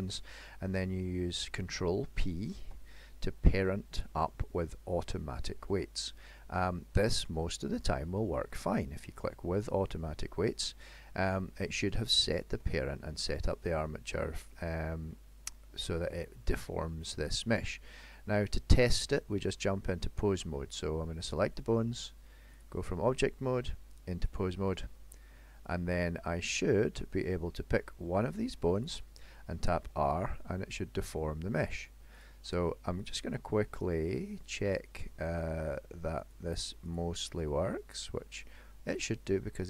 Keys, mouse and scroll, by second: 2.7 ctrl+p, 11.4 middle click, 12.4 shift+middle click, 12.9 middle click, 15.7-16.3 scroll up 2, 16.7 middle click, 17.7-18.8 scroll down 3, 18.1 middle click, 21.3 click, 23.2 click, 26.9 shift+middle click, 28.9 click, 29.9 r, 32.2 click, 32.4 r, 33.8 click, 33.9 r, 36.2 click, 36.9 click, 37.3 r, 38.9 click, 39.2 r.